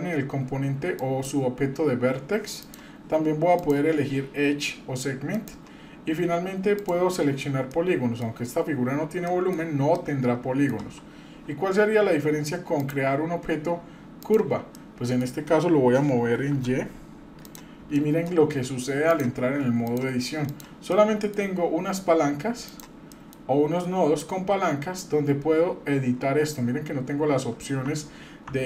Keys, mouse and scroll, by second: 0.3-0.9 scroll up 1, 1.0 click, 2.6 click, 3.6 click, 5.3 click, 6.7 click, 7.7 middle click, 9.2 middle click, 9.9 middle click, 10.8 Tab, 12.8-14.3 drag, 14.7-15.2 middle drag, 16.2 g, 17.9 shift+middle click, 19.1 click, 20.4 click, 20.9 middle click, 22.6 click, 23.1 middle click, 24.2 click, 27.8 Tab, 28.5 Tab.